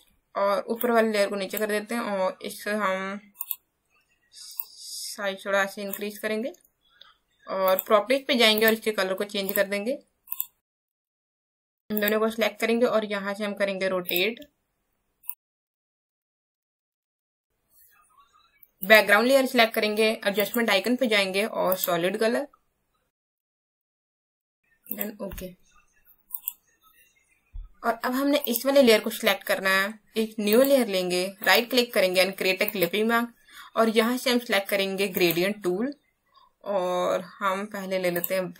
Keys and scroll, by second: 17.1 space.